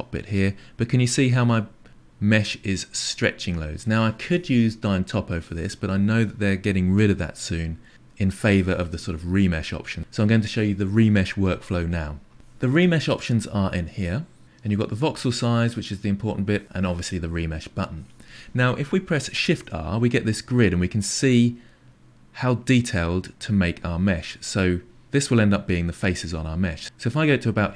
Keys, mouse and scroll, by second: 19.4 shift+r.